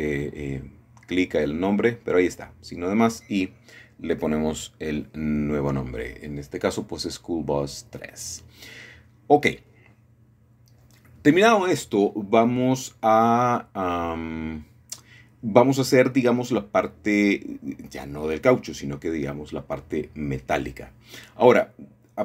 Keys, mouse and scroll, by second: 2.1-2.9 scroll down 3, 3.4 click, 3.9-4.3 scroll down 3, 4.8 scroll down 3, 5.7-6.1 scroll down 3, 7.1-8.1 drag, 8.2 +, 9.2 Return, 10.9-11.9 scroll down 2, 11.9-14.6 middle drag, 18.2-18.8 scroll up 2, 20.1-22.1 shift+middle drag.